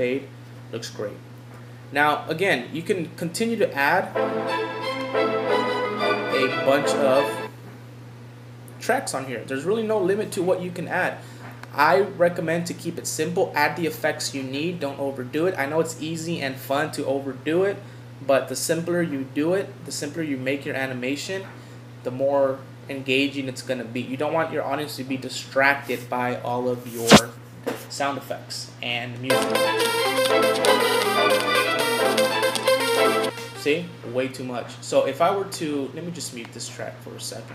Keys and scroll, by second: 26.6 Home.